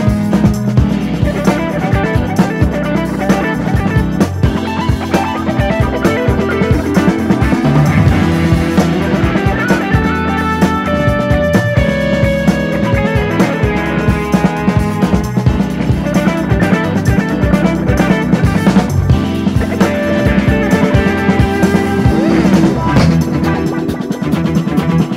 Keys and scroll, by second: 4.5 super+d, 9.1-10.1 typing, 13.3 typing, 21.7-24.2 typing.